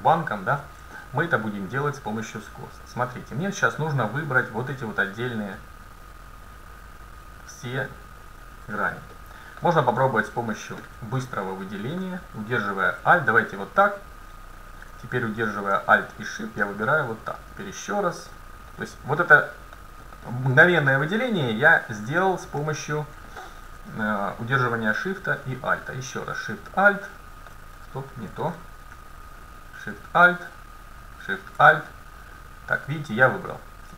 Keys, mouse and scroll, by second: 1.0 middle click, 2.0-2.9 scroll down 1, 3.6 middle click, 4.3-10.0 right drag, 9.2 click, 11.9-13.0 middle drag, 13.6-15.4 right drag, 16.5-19.4 right drag, 18.7-21.0 middle drag, 22.7-23.4 scroll down 1, 23.4-24.6 scroll down 1, 26.8-28.6 right drag, 28.4 ctrl+z, 29.7-33.1 right drag, 31.7 click, 31.7-33.5 middle drag.